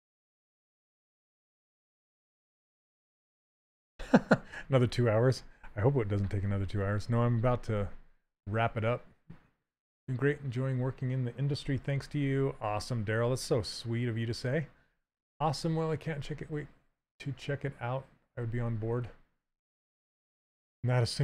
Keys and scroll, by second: 0.1 ctrl+z.